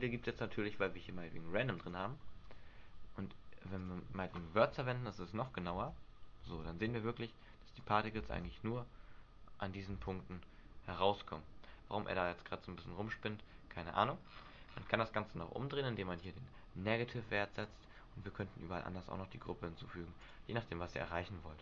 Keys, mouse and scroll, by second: 0.7-1.0 scroll up 1, 1.9 click, 3.9 click, 5.9 alt+a, 5.9 click, 6.6 alt+a, 8.0 click, 8.4 alt+a, 10.1 alt+a, 10.4 middle click, 11.5 middle click, 14.4-16.3 scroll down 5, 16.3 click, 16.3 scroll down 3, 17.6 click.